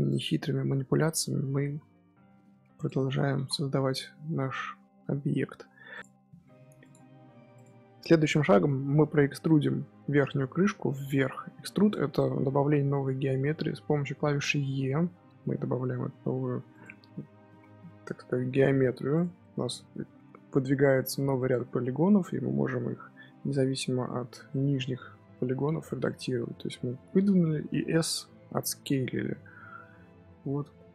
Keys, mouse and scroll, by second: 0.2 scroll up 2, 1.6 e, 3.3 ctrl+z, 5.5 g, 9.0-10.6 middle drag, 10.6 e, 12.8 s, 17.3 g, 19.3-24.0 middle drag, 24.4-27.4 middle drag, 27.8 s.